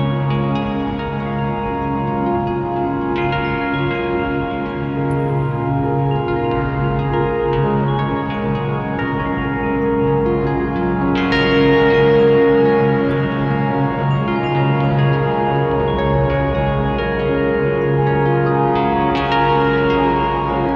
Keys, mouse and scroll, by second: 4.5 click, 5.5 g, 5.6 click, 5.8 g, 7.8 click, 14.1 KP_5, 14.2 click, 16.3 ctrl+s, 18.4 click, 19.8 ctrl+t, 20.3 ctrl+z, 20.4 click.